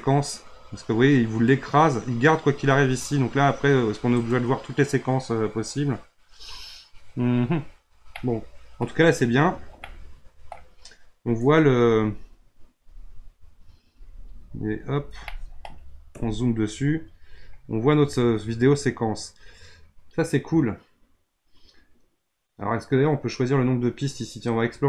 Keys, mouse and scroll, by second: 0.0-7.3 drag, 8.1 middle click, 9.1-9.8 scroll up 5, 9.8-11.3 middle drag, 11.3-12.3 scroll up 1, 12.3-12.6 scroll down 1, 12.6 scroll up 2, 13.1 scroll down 3, 13.5-13.9 scroll up 3, 13.9-15.3 scroll down 4, 15.3 middle click, 16.1 KP_Decimal, 17.1-19.6 scroll up 4, 24.5 click.